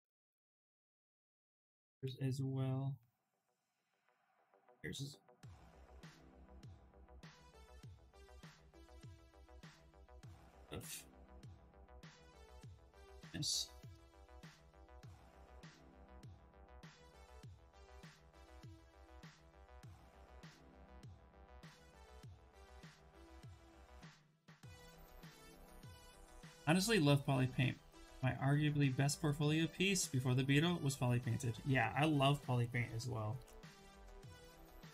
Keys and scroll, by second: 1.0-2.2 typing, 5.1 b, 5.7 l, 6.2 a, 12.1 s, 32.6 s, 33.6 s.